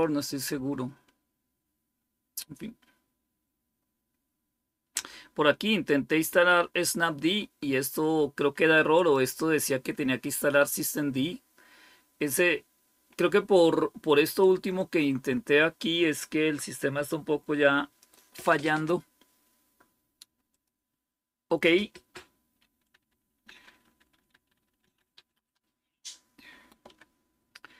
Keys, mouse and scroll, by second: 9.5-10.6 drag, 17.9 click, 20.6-22.9 drag, 25.6 typing.